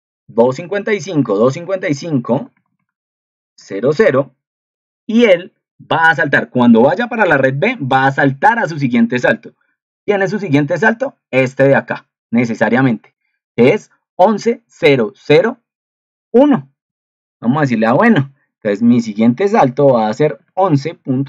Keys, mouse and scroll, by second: 7.3 ctrl+2.